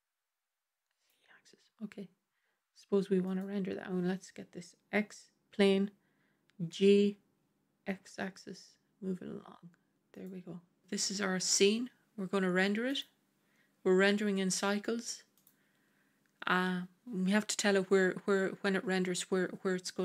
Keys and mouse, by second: 6.6 g, 15.2 click.